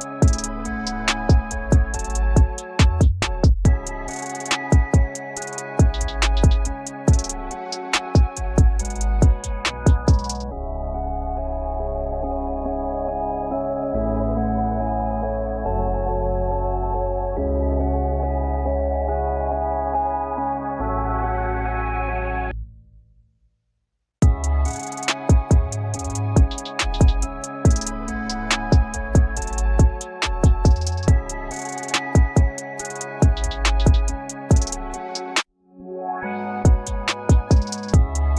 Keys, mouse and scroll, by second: 1.3 scroll up 1, 7.7-8.2 scroll up 1, 18.0 double click, 24.1 shift+click, 24.4 double click, 34.3-34.7 alt+scroll down 1, 35.6 double click, 36.5 alt+scroll down 1, 37.8 double click, 37.9-38.3 scroll up 1.